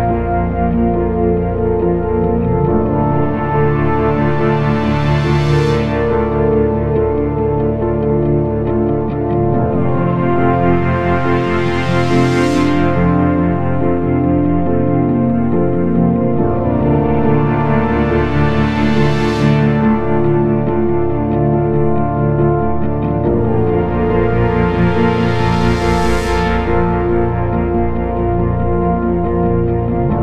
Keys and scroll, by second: 9.5 F3, 9.8 Escape.